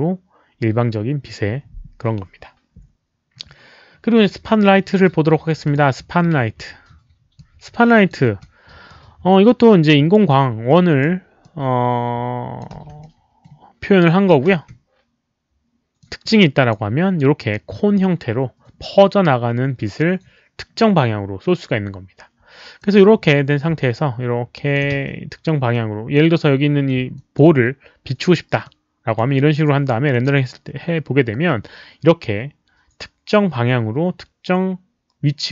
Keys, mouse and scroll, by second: 5.6 click, 7.3 click, 8.2 e, 8.8-10.1 drag, 10.6 click, 11.4-12.5 drag, 11.8-13.2 typing, 13.0 middle click, 14.4 z, 15.9 click, 22.7 click, 23.8 alt+click, 24.8 e, 25.7 click, 27.1 alt+click, 28.6-29.1 drag, 30.1 alt+click, 30.1 e.